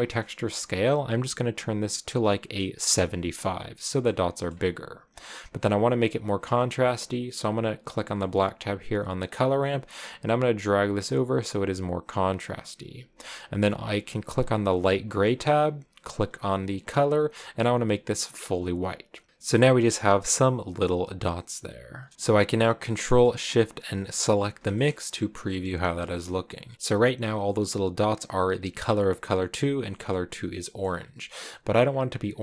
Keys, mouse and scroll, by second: 4.1 middle click, 4.9-5.4 scroll up 4, 8.0 click, 8.4-9.4 middle drag, 9.4-12.6 drag, 14.7 click, 15.3-17.0 middle drag, 17.0 click, 18.7-19.1 scroll down 2, 22.1-24.2 middle drag, 24.2 ctrl+shift+click, 24.7 middle click, 25.1-26.9 scroll up 5, 25.9 shift+middle click.